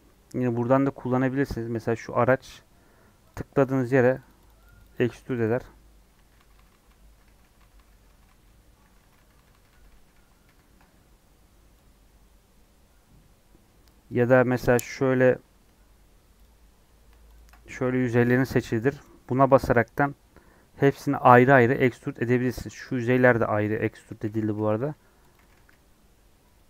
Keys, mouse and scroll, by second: 2.8 scroll down 3, 3.2-6.1 drag, 6.1 ctrl+z, 6.3-7.6 ctrl+z, 7.7 ctrl+z, 7.9 ctrl+z, 8.1 ctrl+z, 8.2 ctrl+z, 8.4 ctrl+z, 8.6 ctrl+z, 8.8 ctrl+z, 9.0-9.5 ctrl+z, 9.6 ctrl+z, 10.4 ctrl+z, 14.1 click, 14.4 scroll up 3, 14.6-16.4 middle drag, 16.4 click, 17.6-20.0 middle drag, 20.0-21.3 drag, 22.8 click, 23.0 g, 24.1 click, 24.2 g, 25.3 click.